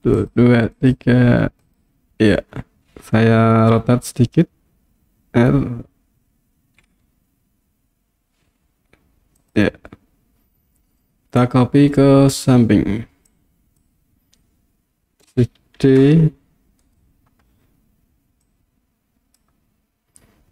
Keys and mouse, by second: 0.3 click, 0.8 click, 1.7 click, 3.8 r, 9.4 click, 13.4 click, 15.9 shift+d, 16.8 right click, 18.5-19.4 drag.